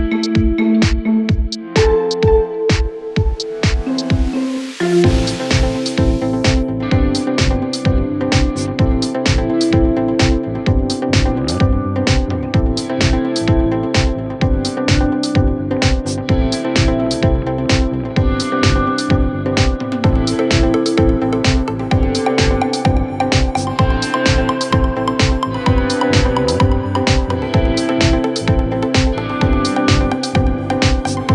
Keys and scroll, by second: 9.2 Delete, 23.9 shift+Page_Down.